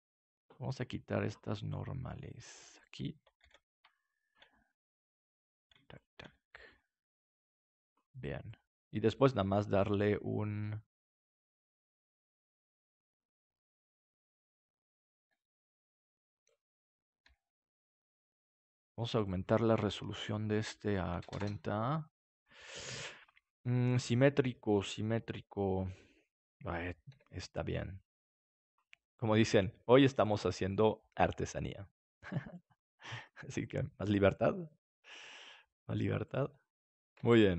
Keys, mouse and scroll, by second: 0.7-2.1 drag, 2.7-4.4 drag, 3.3 ctrl+s, 6.5 g, 7.8-9.6 drag, 8.4-9.6 right drag, 8.8 g, 12.0-13.9 right drag, 14.2-16.0 right drag, 15.1 g, 16.6 click, 17.2 g, 19.3-24.6 drag, 24.6-27.1 right drag, 27.1 g, 29.5-32.2 drag, 29.5-32.2 right drag, 29.7 g, 31.2 g, 32.4 right click, 32.6-34.1 drag, 33.1 right click, 33.4 g, 35.1 g, 36.1 click, 36.3 right click, 37.2 Tab.